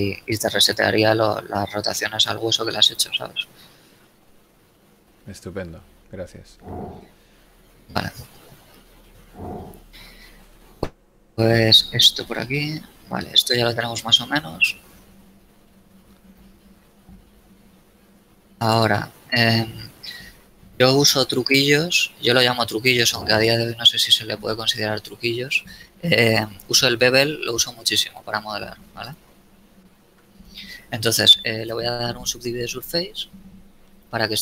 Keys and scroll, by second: 0.7 a, 2.4 x, 10.4 KP_1, 12.1 z, 16.7 z.